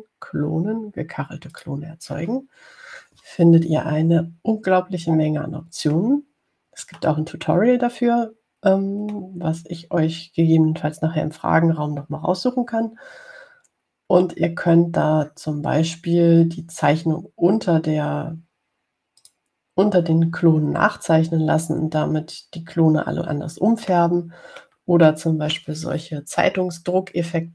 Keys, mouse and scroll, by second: 0.1 click, 2.8 click, 8.2-10.6 middle drag, 20.5 click, 25.3 middle click, 26.4 middle click.